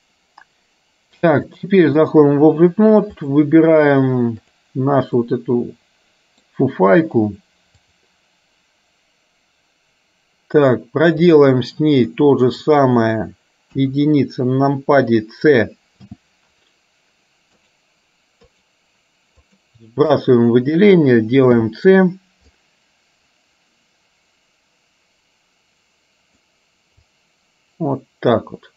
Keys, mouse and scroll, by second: 1.5 click, 3.4 click, 5.3-6.5 middle drag, 7.9-11.6 drag, 12.1 middle click, 13.8 KP_1, 16.3 c, 19.5 click, 20.3 click, 21.6 c.